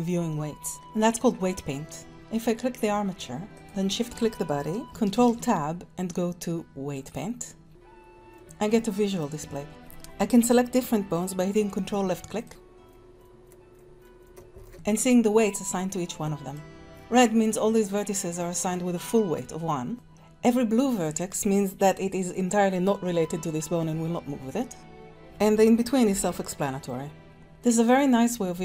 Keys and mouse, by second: 1.7-2.1 drag, 5.1 ctrl+Tab, 8.3 shift+click, 12.3 ctrl+click, 12.8 ctrl+click, 13.7 ctrl+click, 14.6 ctrl+click, 15.7 middle click, 19.5 middle click, 26.0 r, 27.5 middle click.